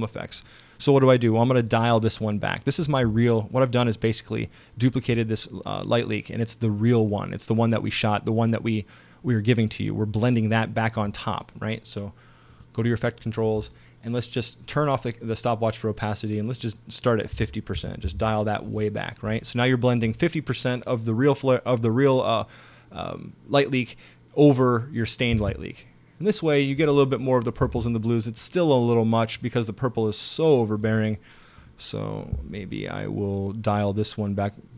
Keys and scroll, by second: 17.4 5, 17.8 0, 18.1 Return, 25.4 space, 27.6 space.